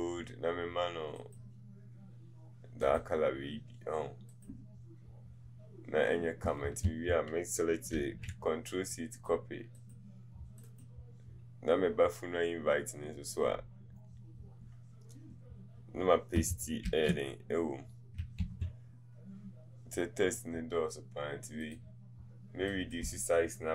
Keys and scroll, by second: 6.8 ctrl+a, 17.0 ctrl+v.